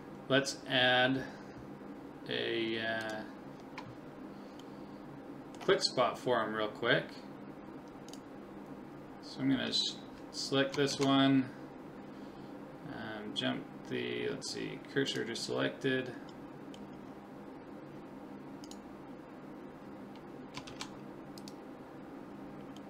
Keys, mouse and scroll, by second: 3.0 click, 4.2-6.6 middle drag, 8.1-10.0 right drag, 10.9 shift+s, 16.4-18.3 middle drag, 18.3-18.7 scroll up 1, 18.7-20.6 right drag, 19.1 middle click, 20.7 shift+s, 22.3-22.8 middle drag.